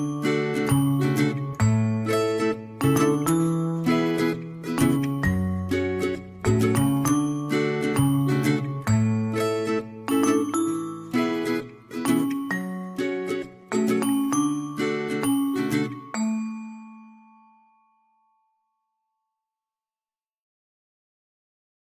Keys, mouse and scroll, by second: 5.9 ctrl+z.